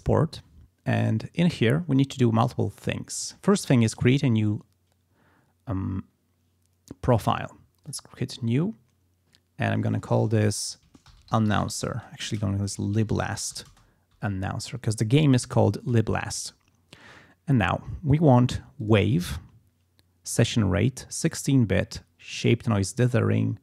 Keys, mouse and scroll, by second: 7.8 click, 9.7 click, 10.8-14.0 typing, 14.1 shift+End, 18.8 click, 22.4 click.